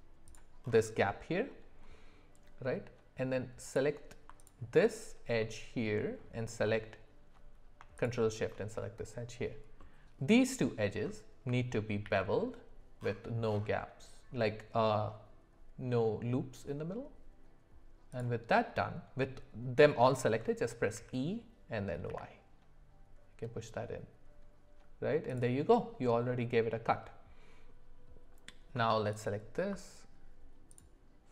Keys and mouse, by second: 5.4 middle click, 7.9 alt+shift+click, 9.8 middle click, 12.0 ctrl+b, 20.9 e, 29.1 alt+click, 30.8 click.